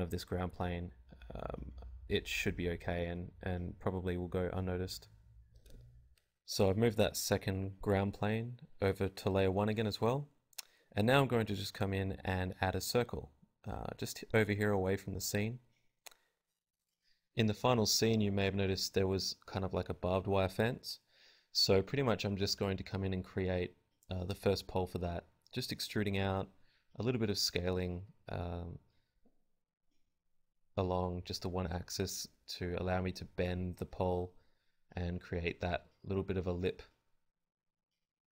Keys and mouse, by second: 2.6 KP_7, 3.0 z, 9.0 click, 9.5 shift+a, 11.1 n, 11.7 n, 11.7 t, 12.9 click, 14.6 t, 15.2 KP_1, 16.2 Tab, 17.5 Tab, 17.6 g, 17.7 Tab, 17.7 click, 17.9 s, 18.5 click, 18.5 KP_1, 18.7 e, 19.3 Tab, 19.3-20.5 drag, 19.4 KP_Divide, 19.7 Tab, 20.5 g, 20.8 click, 21.0 z, 21.2 z, 21.6 g, 22.3 click, 22.7 e, 22.9 click, 23.3 r, 23.4 click, 23.4 s, 24.2 click, 24.6 e, 25.2 click, 25.6 Tab, 25.9 Tab, 26.4 KP_1, 26.6 r, 27.4 click, 28.1 f, 28.4 Tab, 29.0 Tab, 29.2 ctrl+r, 29.9 click, 30.4 s, 30.7 Tab, 30.7 click, 31.6 t, 32.4 t, 33.3 a, 33.3 KP_1, 34.5 Tab, 34.7 a, 36.5 shift+d, 37.9 click, 38.2 a.